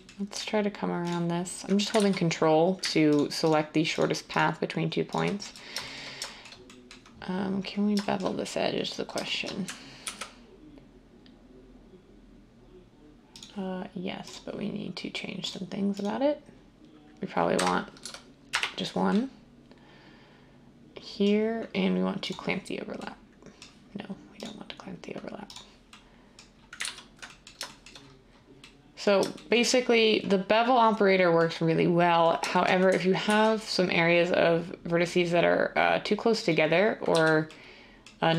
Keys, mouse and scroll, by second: 2.0 ctrl+z, 10.0 ctrl+b, 17.6 BackSpace, 18.0 1, 18.5 Return, 26.8 ctrl+z, 33.2 ctrl+b, 37.1 z.